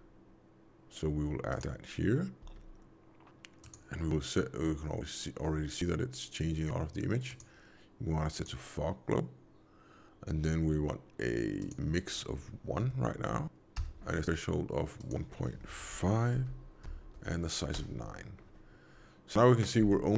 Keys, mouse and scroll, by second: 2.4 g, 7.2 click, 11.5 click, 14.9 click.